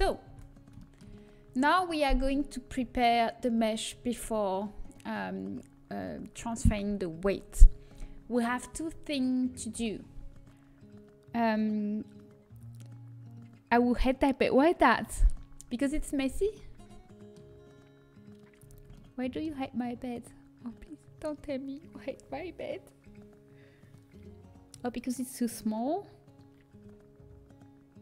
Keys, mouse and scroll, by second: 0.2 Tab, 15.2-18.5 middle drag, 20.2 middle click.